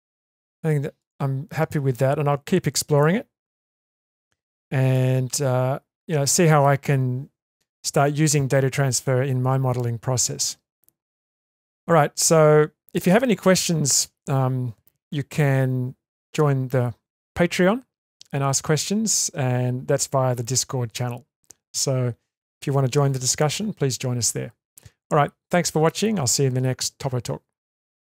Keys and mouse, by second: 0.4 click, 1.1 click, 1.7 click, 2.7-3.6 ctrl+middle drag, 4.1-5.0 shift+middle drag, 5.4-6.7 middle drag.